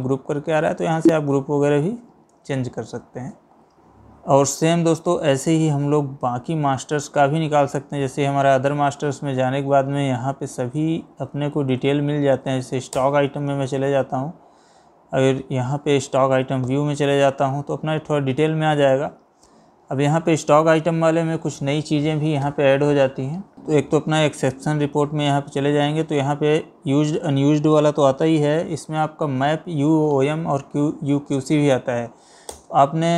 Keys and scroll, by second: 2.1 Escape, 3.7 Escape, 9.6 Down, 11.6 Up.